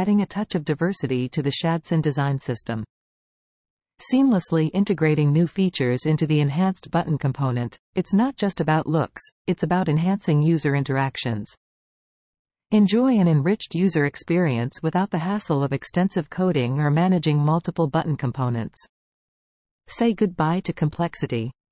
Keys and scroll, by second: 4.7 super+a, 5.6 super+v, 6.4 super+s, 6.9 super+Tab, 14.1 super+c, 15.9 super+v, 16.2 super+Tab, 17.2 super+c, 17.4 super+Tab, 18.4 super+v, 18.7 super+s, 19.6 super+Tab.